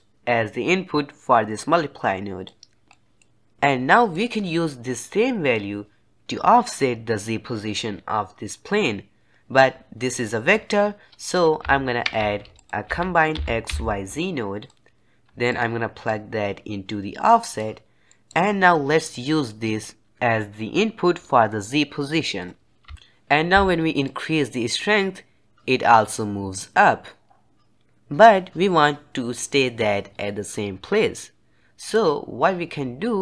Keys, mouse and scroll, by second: 2.8 scroll up 1, 2.8-4.0 middle drag, 4.0-6.1 drag, 12.1 shift+a, 16.0-18.0 drag, 18.0 middle click, 18.2-19.0 scroll up 1, 19.0 click, 20.2-20.7 drag, 22.9-24.0 shift+middle drag, 24.0-27.0 drag.